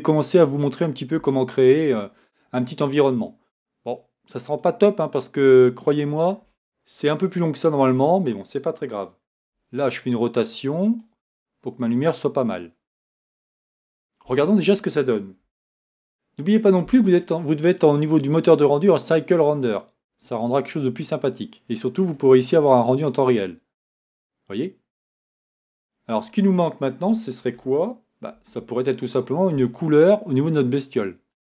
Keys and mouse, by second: 7.2 KP_1, 9.4 r, 28.3 shift+z.